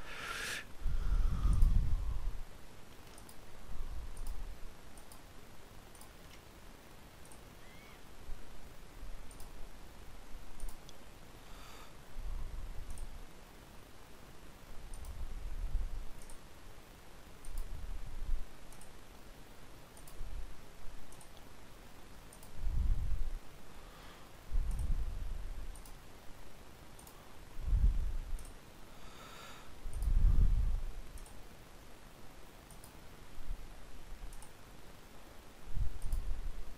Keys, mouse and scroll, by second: 1.2-8.5 right drag, 7.0-8.8 drag, 9.0-12.6 right drag, 12.6-14.5 drag, 14.6-16.5 right drag, 15.9-26.8 drag, 17.1-21.4 right drag, 22.0-24.4 right drag, 25.4-34.1 right drag, 28.1-30.5 drag, 30.9-35.8 drag, 35.6-36.7 right drag.